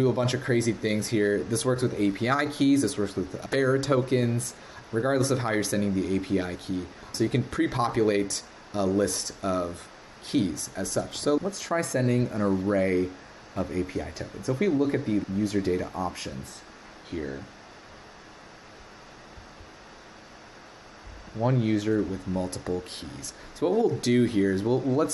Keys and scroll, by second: 11.1 super+Tab.